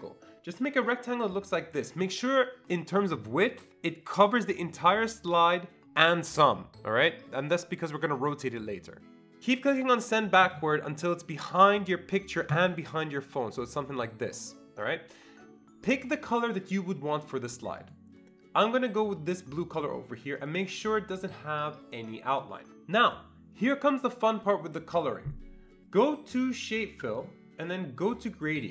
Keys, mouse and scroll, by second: 1.1-9.4 drag, 10.4-12.5 drag, 12.5-15.2 drag, 17.8 click, 19.6 click, 20.4 click, 27.0-28.7 click.